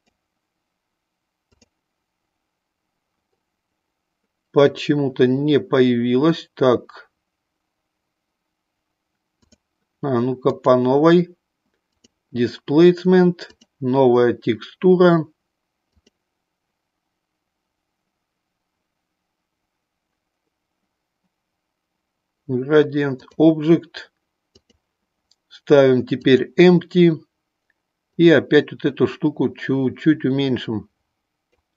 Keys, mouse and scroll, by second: 0.0-1.6 drag, 9.4 click, 10.5-12.2 drag, 13.4 click, 16.0-23.5 drag, 24.6-26.4 drag, 28.1-31.6 drag.